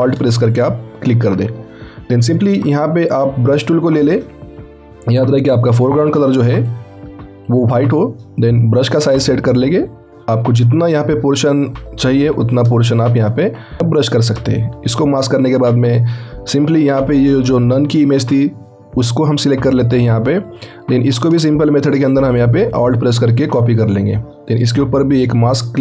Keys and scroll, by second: 12.2 x.